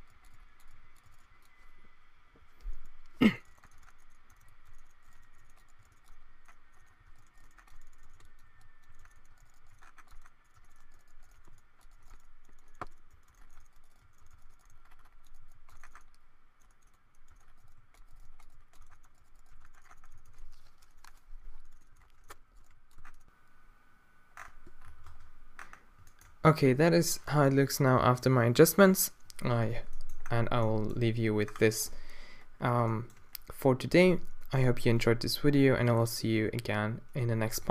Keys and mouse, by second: 0.0-1.2 typing, 3.4 Tab, 3.7 Tab, 3.8 Tab, 4.2 Tab, 4.3-5.8 typing, 5.0-5.5 drag, 5.6 click, 6.0 Tab, 6.0 right click, 6.5 drag, 7.0 Tab, 7.1-9.6 typing, 7.6 Tab, 7.8 middle click, 8.0 Tab, 8.9 Tab, 9.2 Tab, 10.1 Tab, 10.5 Tab, 11.4 g, 11.9 g, 12.0 Tab, 13.1-15.5 typing, 13.5 Tab, 14.1 Tab, 14.3 Tab, 15.3 right click, 15.7 Tab, 17.2 Tab, 17.5 middle click, 17.6-20.2 typing, 18.0 middle click, 18.8 Tab, 19.0 Tab, 19.5 Tab, 21.9 Tab, 22.1 Tab, 22.2 Tab, 22.5 middle click, 22.7 d, 22.9 a, 23.0 middle click, 24.4-24.8 middle drag, 24.9 a, 25.1 Tab, 31.5 middle click, 32.4 middle click, 33.2 middle click.